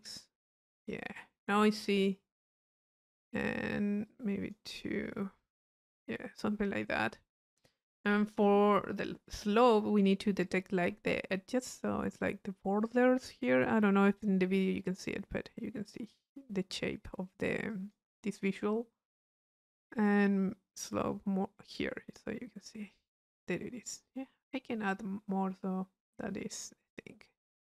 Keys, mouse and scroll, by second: 4.1 click, 5.4 click, 6.7-8.0 middle drag, 10.5 click, 10.9-13.1 middle drag, 16.8 middle click, 17.7-18.9 drag, 19.6 click, 20.7-22.0 drag, 22.0 middle click, 22.0-22.9 scroll up 1.